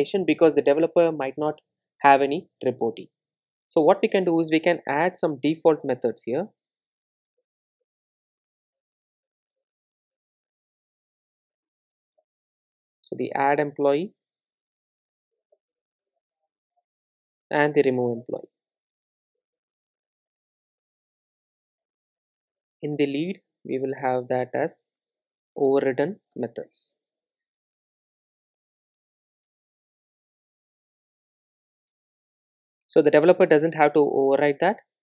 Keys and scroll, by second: 6.2 Return, 11.9 Return, 16.1 super+d, 20.2 super+e, 26.4 Return, 28.9 Return, 31.3 super+e.